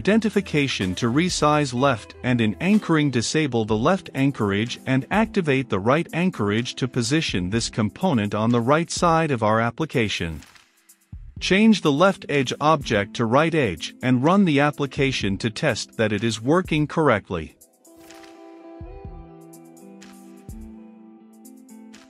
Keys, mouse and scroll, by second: 0.0-1.1 typing, 2.2-10.0 drag, 10.0-11.2 scroll up 2, 11.2-13.6 drag, 14.1-15.6 typing, 16.1-22.0 drag.